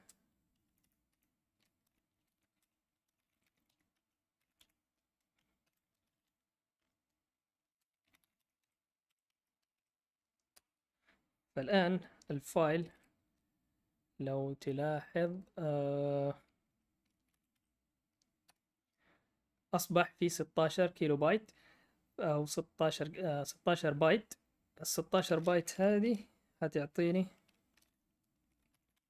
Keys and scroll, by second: 0.0-6.2 typing, 7.7-10.5 typing, 12.8-13.6 typing, 17.0-18.4 typing, 27.7-29.0 typing.